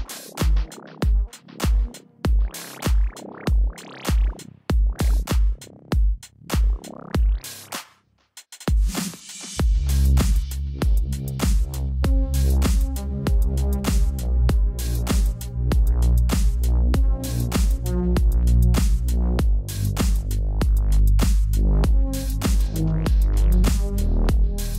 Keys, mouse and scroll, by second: 1.9 Escape, 1.9 click, 5.9 ctrl+l, 9.2 Return, 10.1 ctrl+t, 10.4 alt+click, 10.5 click, 11.8 Return, 11.9 click, 12.3 ctrl+alt+click, 12.4-13.3 typing, 12.9 right click, 13.2 click, 14.9 Return, 15.4 ctrl+l, 15.8 click.